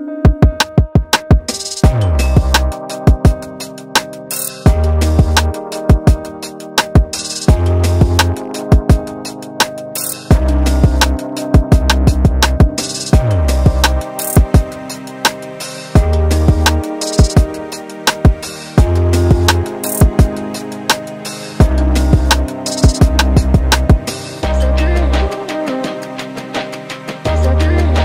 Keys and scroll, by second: 6.1 ctrl+d, 18.6 ctrl+j, 19.3 ctrl+t, 26.6 ctrl+t.